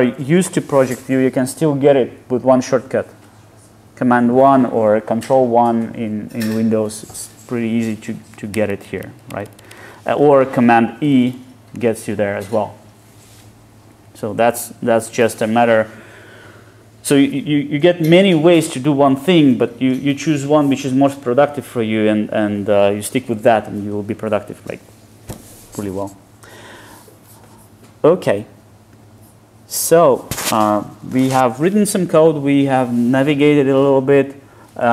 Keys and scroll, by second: 0.3 super+1, 8.6 ctrl+shift+super+Right, 9.3 ctrl+shift+super+Left, 10.2 shift+super+Left.